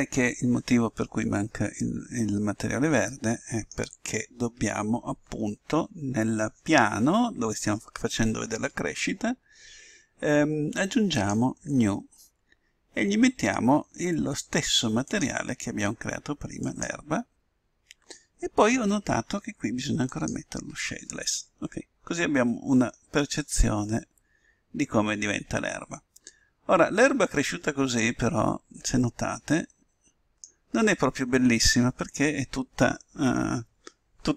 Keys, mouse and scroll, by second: 2.2-3.9 middle drag, 12.1-13.7 drag, 16.0-17.4 drag, 21.1-22.6 drag, 22.6-25.9 middle drag, 30.0 middle click.